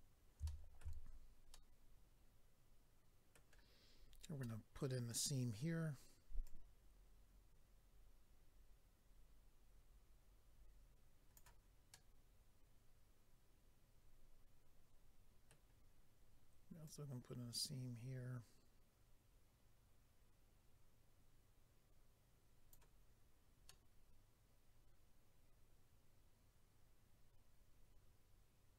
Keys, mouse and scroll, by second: 0.4 shift+middle click, 1.0-1.5 scroll up 3, 1.5 middle click, 4.4 middle click, 6.4 click, 11.9 middle click, 16.8 click, 23.7 middle click.